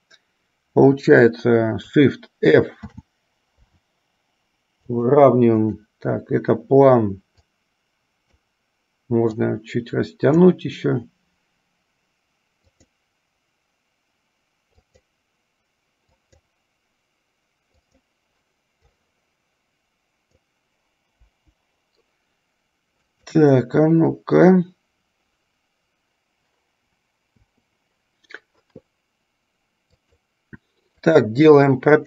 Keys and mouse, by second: 3.0 shift+f, 5.7 click, 7.7-8.7 drag, 9.7-10.9 drag, 12.9 click, 15.1 click, 16.4 click, 18.1 click, 19.2-20.6 drag, 21.4 Delete, 23.2 click, 27.5 i, 30.0 click, 31.1 click.